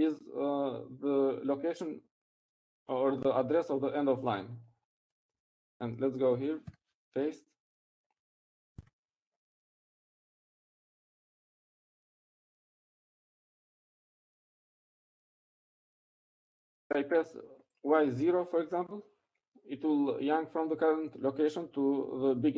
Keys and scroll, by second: 0.1 y, 0.6 shift+4, 8.1 Down, 9.3 p, 11.2-12.0 typing, 13.6 Escape, 15.3 u, 17.1 Up, 17.1 Right, 17.5 Right, 18.1 Right.